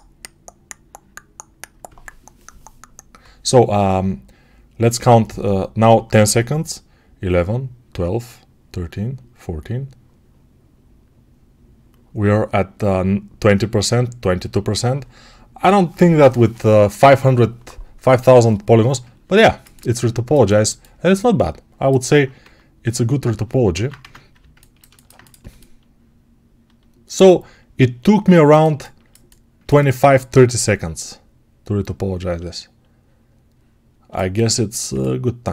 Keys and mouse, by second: 23.6 alt+q, 23.9 Tab, 24.7 alt+shift+right click, 25.3-35.5 alt+middle drag.